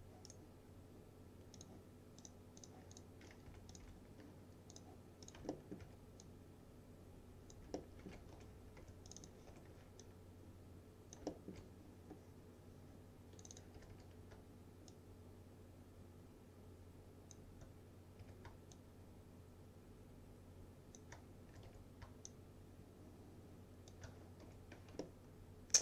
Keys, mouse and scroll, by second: 0.3 right click, 1.6 click, 3.6 Delete, 3.8 click, 3.9 Delete, 4.8 click, 5.6 alt+middle click, 5.9 w, 6.3-8.1 drag, 7.8 alt+middle click, 8.4 F3, 8.9 2, 9.1 click, 9.6 F3, 10.1-11.3 click, 11.4 alt+middle click, 13.5 click, 13.6-14.5 typing, 15.0-17.5 shift+drag, 18.3 typing, 18.8-21.3 shift+drag, 21.3-22.2 typing, 22.3-24.2 shift+drag, 24.5 F4, 25.1-25.8 alt+middle drag.